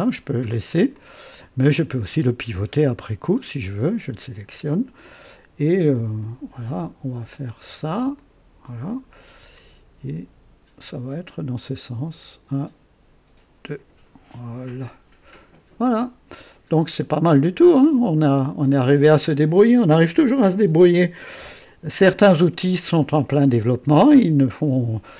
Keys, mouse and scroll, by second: 0.4 scroll down 1, 0.9-2.2 drag, 3.5 click, 6.2 right click, 8.1 click, 9.1-10.9 drag, 11.6-14.0 drag, 14.6 click, 15.3 click, 15.8-17.6 drag, 18.2-20.2 scroll up 1, 22.3 click, 24.0-25.1 drag.